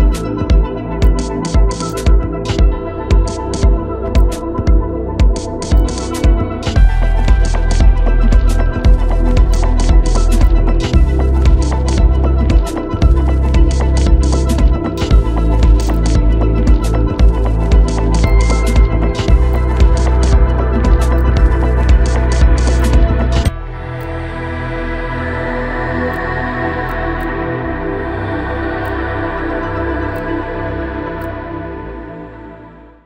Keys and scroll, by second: 16.0 alt+Right, 24.6 ctrl+e.